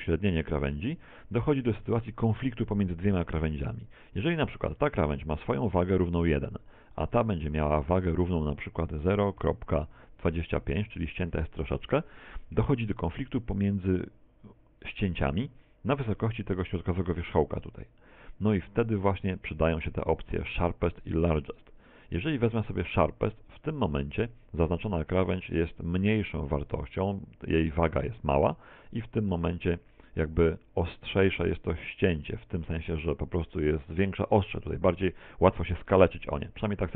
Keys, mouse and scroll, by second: 0.6 shift+middle click, 6.0 right click, 8.5 right click, 10.7 right click, 11.8 click, 26.5 click.